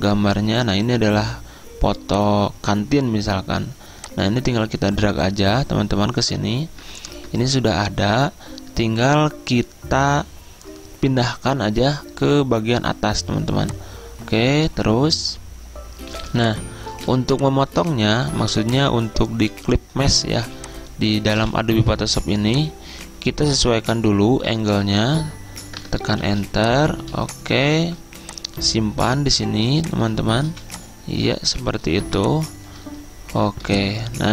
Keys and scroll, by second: 7.2 Return, 16.2 z, 17.7 z, 18.4 v, 20.5 z, 25.8 Return, 26.3 z, 27.9 v, 29.7-32.2 typing.